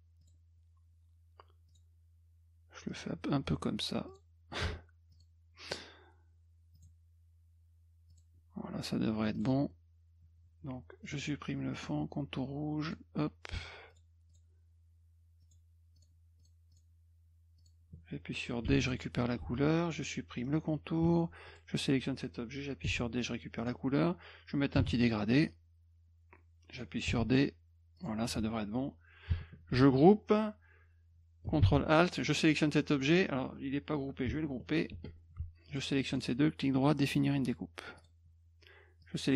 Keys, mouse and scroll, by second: 0.2 click, 1.7 click, 2.9 click, 4.1 click, 5.1 click, 5.6 click, 6.7 click, 8.1 click, 9.3 click, 11.0 click, 11.7 middle click, 12.8 click, 13.9 click, 14.3 click, 15.4 click, 16.0 click, 16.4 click, 16.7 click, 17.6 click, 18.7 d, 18.8 click, 19.4 F1, 20.4 middle click, 21.5 click, 22.9 d, 23.6 click, 24.8 g, 25.5-26.8 drag, 27.1 d, 28.0 click, 28.3 F1, 31.6 alt+d, 32.3 click, 34.9 ctrl+g, 35.7 shift+click, 36.1 right click, 38.0 click, 39.0 click.